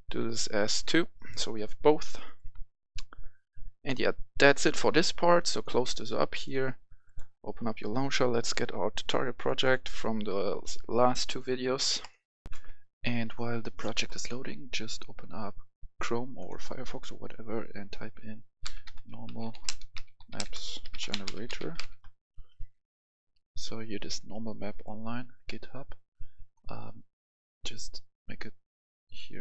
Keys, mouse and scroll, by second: 0.1 click, 0.6 click, 7.3 click, 8.0 scroll up 1, 9.4-10.6 drag, 12.4 F10, 14.8-16.0 drag, 18.5-21.7 typing, 21.8 Return, 24.6 click, 27.2-29.4 drag.